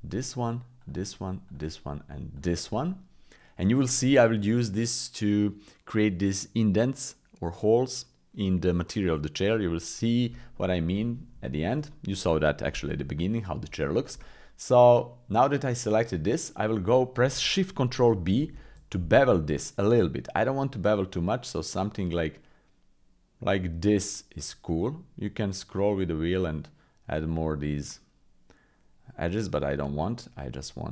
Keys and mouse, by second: 1.5-2.7 shift+drag, 2.7 middle click, 10.5 click, 11.4 shift+middle click, 11.9 middle click, 13.8 shift+middle click, 14.2 middle click, 14.3 click, 14.4 middle click, 18.3 ctrl+shift+b.